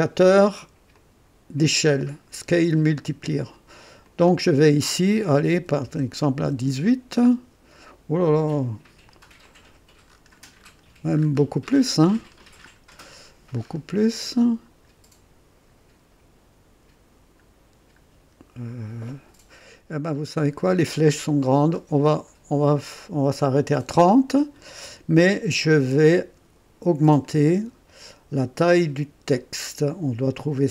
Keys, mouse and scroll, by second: 0.9-2.5 drag, 4.0 click, 5.5 KP_1, 5.8 KP_8, 6.4 Return, 9.4 click, 10.1 scroll up 1, 10.6 scroll up 1, 11.1-13.8 scroll up 6, 14.6-14.9 scroll up 1, 20.2-21.3 scroll down 3, 21.7 scroll down 2, 22.6-22.9 scroll down 2, 27.2-30.7 drag.